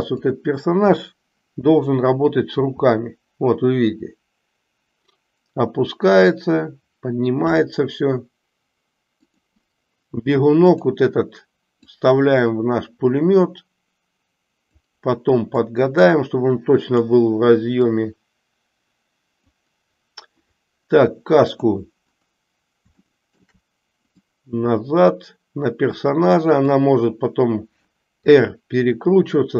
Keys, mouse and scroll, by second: 2.6 r, 11.7-14.8 drag, 15.7-17.1 drag, 17.8 click, 18.2-19.5 drag, 21.5 click, 22.9-23.6 shift+middle drag, 24.1-26.8 drag, 28.2 r.